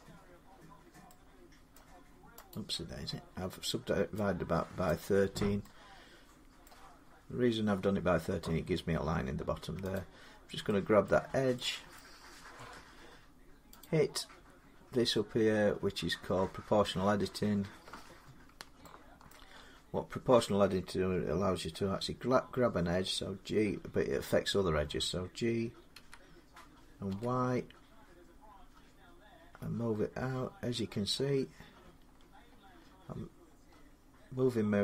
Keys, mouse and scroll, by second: 1.5 middle click, 2.3 right click, 4.7 click, 6.4 middle click, 6.9-7.3 scroll, 7.4-9.7 scroll down 1, 9.7 click, 10.8 middle click, 11.0-11.3 scroll up 3, 11.7 middle click, 11.7 scroll down 2, 13.6 click, 19.1 shift+middle click, 19.4-21.7 scroll up 1, 25.7 g, 26.9 y, 28.6-29.1 scroll, 29.1 scroll up 6, 29.2-29.7 scroll down 1, 29.7-32.1 scroll up 17, 32.1 scroll down 23, 32.3 scroll up 6, 32.6 scroll down 2, 32.8 scroll up 2, 33.1 scroll down 2, 33.3 scroll up 2, 33.5-33.8 scroll down 2, 33.8-34.8 scroll.